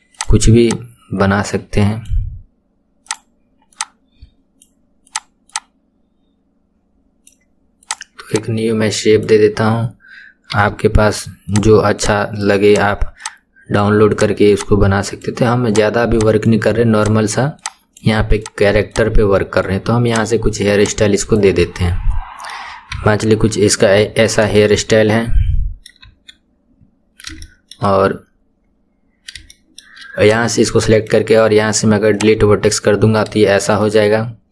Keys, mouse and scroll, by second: 0.2 click, 0.6 click, 3.0 click, 3.7 click, 5.0 click, 5.5 click, 7.8 click, 8.3 click, 10.5 KP_3, 11.5 click, 11.9 click, 12.7 click, 14.1 click, 14.5 click, 15.7 click, 16.9 click, 17.6 click, 18.4 click, 18.9 click, 20.0 click, 20.8 click, 21.6-22.9 middle drag, 22.9 KP_1, 23.7-24.6 scroll down 2, 24.6-26.0 middle drag, 26.0 KP_1, 27.0 scroll up 2, 27.4-29.1 shift+middle drag, 29.1 scroll up 2, 29.5-30.2 shift+middle drag, 30.2 click, 30.9 right click, 32.2 right click, 32.8-33.4 scroll down 2, 33.4-33.8 scroll down 1, 33.8-34.5 middle drag.